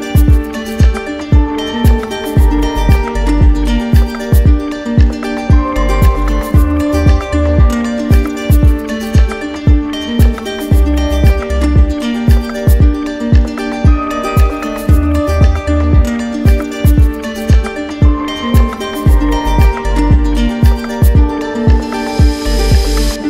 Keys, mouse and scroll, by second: 0.1 click, 1.3 alt+click, 4.7 alt+click, 7.5 alt+click, 8.3 click, 8.8 alt+click, 14.4 alt+click, 15.4 alt+click, 19.1 click, 22.3 click.